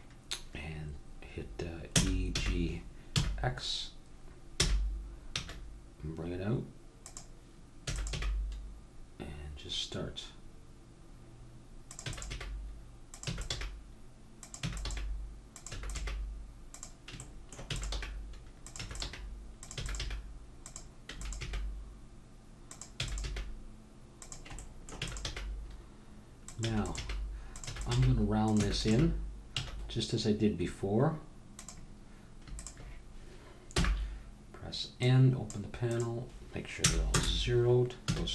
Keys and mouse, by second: 1.9 e, 7.8 e, 8.3 g, 12.0 e, 12.3 g, 13.3 e, 13.5 g, 14.6 e, 14.8 g, 15.9 e, 16.0 g, 17.7-20.0 typing, 21.1 e, 21.4 g, 23.0 e, 23.3 g, 24.7 middle click, 25.0 e, 25.3 g, 26.7-28.9 typing, 32.5-34.7 drag, 33.7 n, 35.0-37.0 drag, 37.0 right click, 37.6 click, 38.0 a.